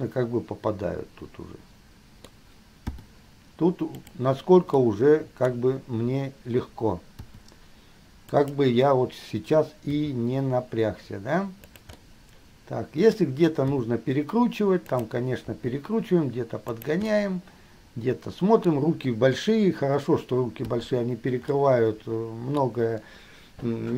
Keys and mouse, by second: 0.0-3.0 middle drag, 3.1 i, 5.4 middle click, 7.4 i, 8.5 middle click, 10.0 g, 12.1-22.0 middle drag, 13.9 r, 15.8 g, 20.9 i, 22.9-23.9 middle drag.